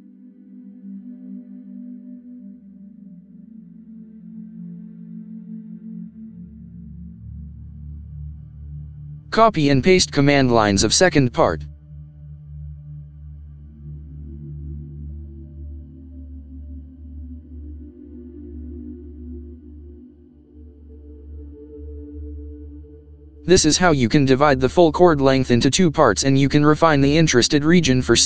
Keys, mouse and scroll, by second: 1.0 scroll up 2, 1.2-2.4 middle drag, 5.5 middle click, 17.5 ctrl+v, 18.0 Return, 24.6 middle click, 26.8-27.4 scroll down 2, 27.4 middle click.